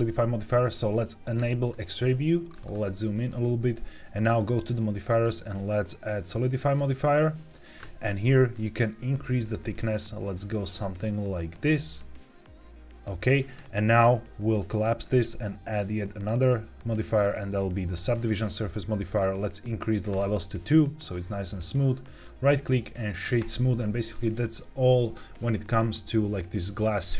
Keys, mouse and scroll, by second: 1.3 click, 2.0 middle click, 2.4-2.9 scroll up 3, 4.1 click, 5.0-7.2 drag, 8.5-13.0 shift+drag, 14.5 click, 14.9-17.3 drag, 20.0 click, 22.0-23.4 right drag.